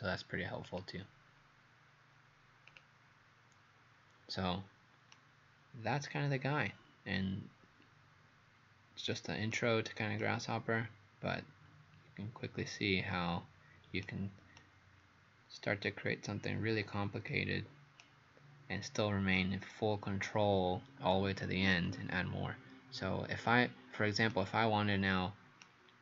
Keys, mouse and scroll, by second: 5.2 right click.